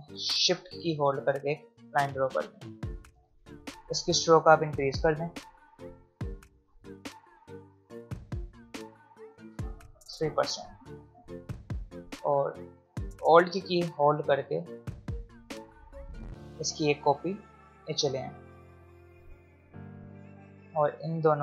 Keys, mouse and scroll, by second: 3.2 v, 5.0 scroll up 1, 6.1-6.9 scroll down 1, 10.2-11.7 scroll up 1, 12.4-13.9 alt+drag, 16.0-19.6 alt+drag, 17.6 click, 18.4 click.